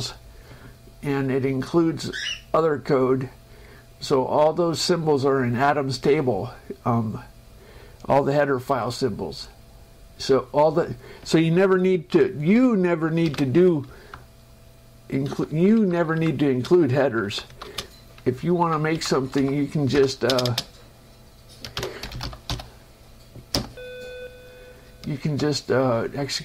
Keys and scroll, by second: 13.6 ctrl+m, 14.2 Down, 16.1 Up, 16.9 space, 17.2 Up, 17.9 Right, 18.7 Up, 19.6 Right, 20.2 Return, 20.6 space, 22.1-23.1 typing, 23.9 F5.